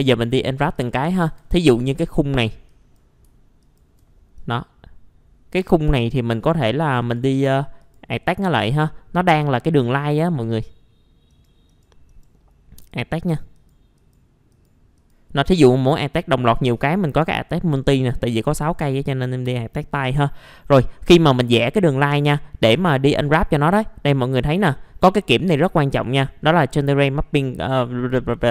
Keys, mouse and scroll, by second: 0.7 click, 1.2 F4, 1.6-2.1 scroll down 1, 2.1 scroll up 1, 2.7 click, 3.6 alt+click, 4.1 scroll up 1, 4.3 right click, 6.4 click, 8.2 right click, 9.4 click, 11.3 right click, 12.8 click, 18.8 right click, 19.2-21.6 scroll up 1, 21.6-22.7 drag, 22.9 middle click, 23.0 scroll down 1, 23.2 F4, 23.5 middle click, 24.1-27.3 scroll down 1.